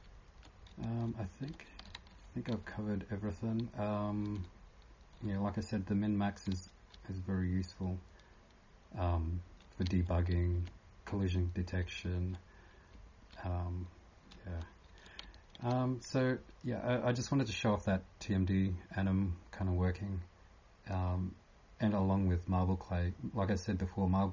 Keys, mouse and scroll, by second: 4.2 s, 9.8-10.3 typing, 11.8 typing, 12.9 typing, 14.3-15.2 typing.